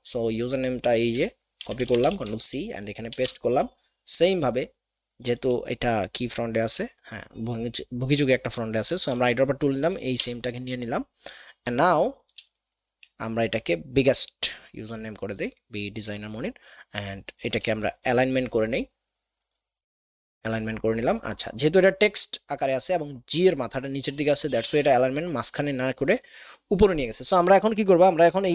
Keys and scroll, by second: 1.6 ctrl+c, 2.1 ctrl+alt+Tab, 3.1 ctrl+alt+v, 8.7 |, 10.2 v.